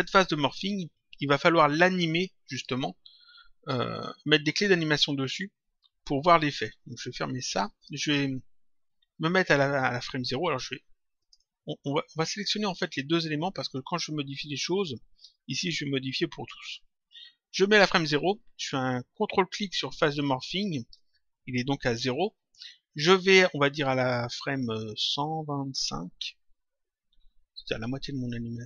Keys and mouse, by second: 6.9 click, 11.1 shift+click, 12.3 ctrl+click, 20.4 ctrl+click, 24.3 click.